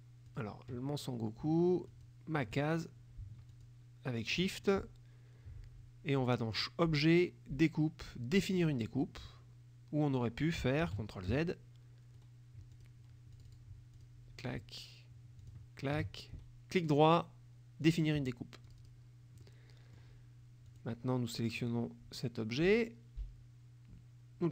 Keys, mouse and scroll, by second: 0.4 click, 2.0 shift+click, 3.6 shift+click, 6.6 click, 8.5 click, 10.9 ctrl+z, 12.2 right click, 12.8 click, 13.4 click, 14.0 click, 15.5 shift+click, 16.4 shift+right click, 17.9 click, 18.7 click, 19.5 middle click, 21.6 click, 22.6-24.5 drag.